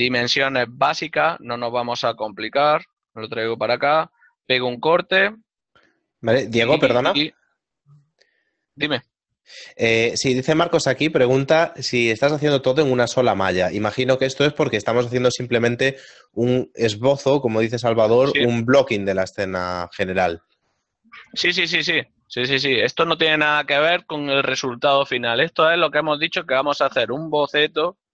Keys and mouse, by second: 0.6 Tab, 1.0 click, 1.6 right click, 2.9 y, 4.1 click.